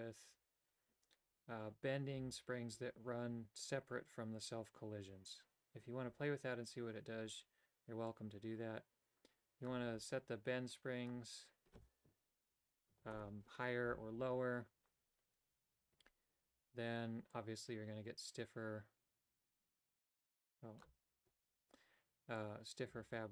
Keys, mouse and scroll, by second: 8.2-9.8 drag, 10.9-13.9 drag, 17.4-20.9 drag, 22.4-23.3 drag.